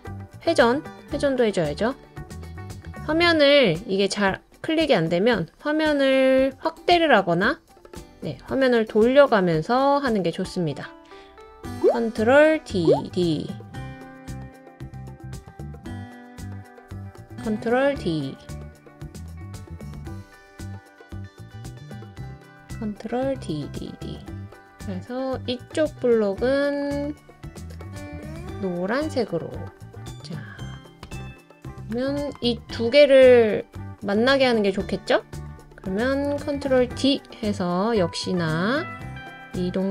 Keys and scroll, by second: 12.6 super+d, 13.0 super+d, 16.0 super+d, 17.8 super+d, 17.9 super+d, 18.2 super+d, 19.9 super+d, 20.1 super+d, 20.3 super+d, 22.4 super+d, 22.6 super+d, 22.9 super+d, 36.5 super+d.